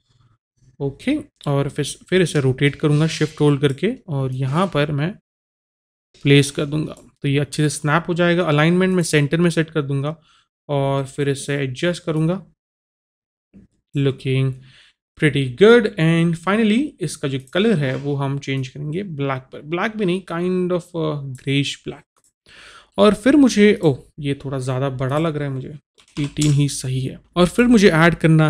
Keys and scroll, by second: 26.2 KP_8, 26.4 Return.